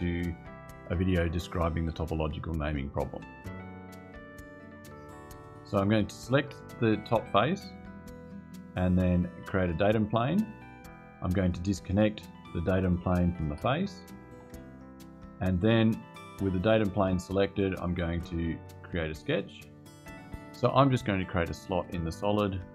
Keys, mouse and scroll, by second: 6.8 click, 9.9 click, 11.6 click, 13.2 BackSpace, 14.1 click, 16.7 click, 19.3 click.